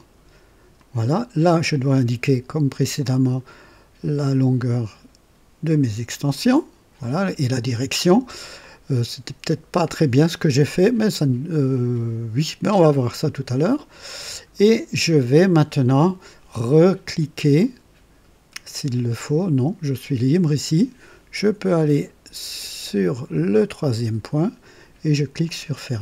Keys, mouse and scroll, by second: 0.7 click, 6.3 click, 8.6-14.2 drag, 17.6-19.4 drag, 23.6 click, 25.4 click.